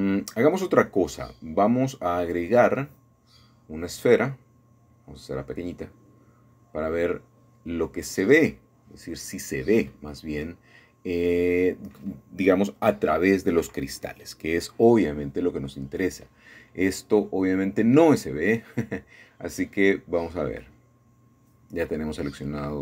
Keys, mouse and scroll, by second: 0.0-0.9 scroll up 1, 0.9-1.2 scroll up 1, 4.3-5.4 drag, 5.7 s, 7.1-9.5 drag, 9.5 middle click, 10.2 Tab, 14.2 middle click, 14.5 scroll up 1, 14.6 scroll down 2, 15.1-15.4 scroll up 1, 16.3 c, 16.7-18.7 drag, 19.1 Escape, 19.9-20.3 scroll down 1, 20.3 shift+middle click, 21.9 middle click.